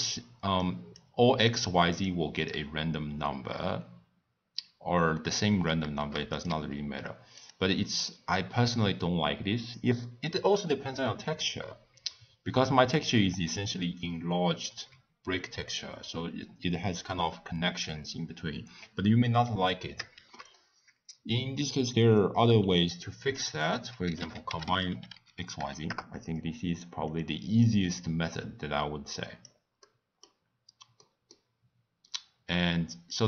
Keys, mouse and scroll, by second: 0.6 click, 1.5 click, 2.0 click, 17.0 click, 27.6-33.2 drag.